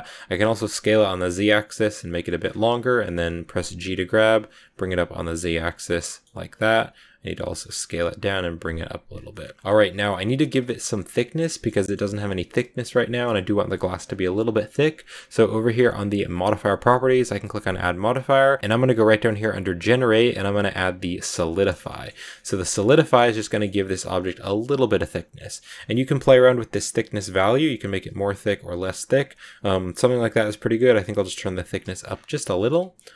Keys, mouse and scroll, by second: 0.2 s, 2.1 shift+middle click, 2.4 scroll up 1, 2.5 g, 6.0 middle click, 6.4 s, 9.1 scroll up 1, 9.2 middle click, 9.6-10.0 scroll down 2, 10.0-11.8 middle drag, 11.8 scroll up 3, 16.9-18.7 drag, 21.7 shift+scroll up 1, 21.7-22.8 shift+middle drag, 22.8 scroll down 1, 22.9 shift+middle click, 23.1 scroll up 1, 23.3 middle click, 23.6 scroll up 1, 23.9-26.1 middle drag, 26.1-29.1 shift+drag, 30.4-32.0 shift+drag, 32.0 scroll down 1, 32.1-33.1 middle drag.